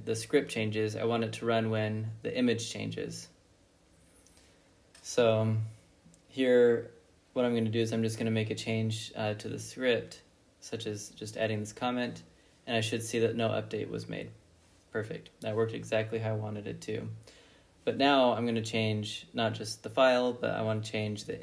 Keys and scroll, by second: 0.6 Up, 0.7 Left, 1.2-3.3 Left, 2.7 ctrl+a, 3.0 Right, 3.2 Right, 3.3 Right, 3.5 Right, 3.7 Right, 4.0 Right, 4.9-6.6 typing, 8.2 Return, 9.5 ctrl+b, 9.8-14.5 typing, 11.7 Return, 14.8 Return, 15.4 ctrl+b, 17.3 ctrl+b, 17.6 n, 18.9-19.8 typing, 21.1 Return.